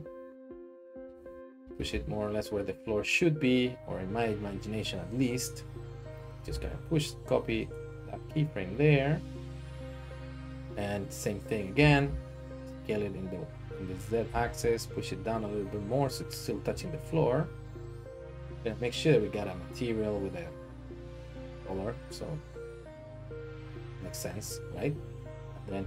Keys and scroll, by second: 1.6 g, 1.8 z, 6.7 shift+d, 6.7 x, 7.6 ctrl+Tab, 11.8 s, 14.2 g, 14.4 z.